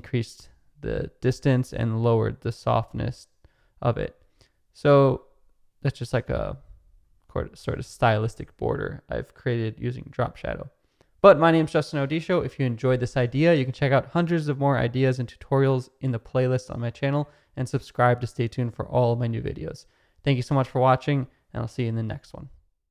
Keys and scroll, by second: 12.8 space.